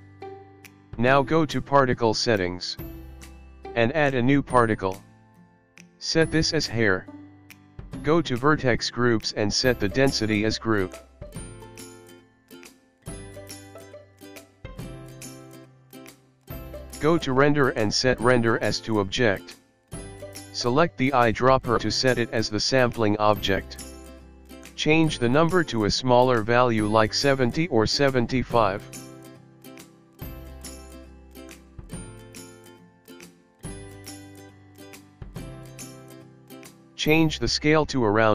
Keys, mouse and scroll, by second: 0.9 click, 2.0 click, 4.0 click, 6.2-6.8 scroll down 12, 8.1 click, 14.5 click, 17.6 click, 20.5 click, 23.7 click, 27.5 middle click, 30.9 scroll down 2, 31.3 middle click, 32.5 click, 34.8 click, 35.9-37.1 scroll down 1, 37.1 click, 38.1 click.